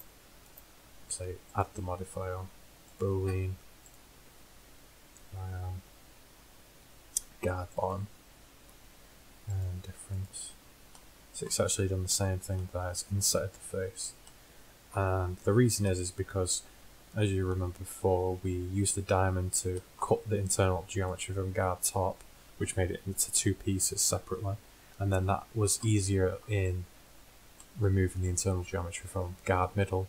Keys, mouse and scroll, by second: 0.0-1.6 drag, 1.6-2.4 middle drag, 2.4-3.6 drag, 4.0-8.0 drag, 9.6-11.6 drag, 21.2-25.3 middle drag, 25.3-26.3 scroll up 1, 29.6-30.0 middle drag.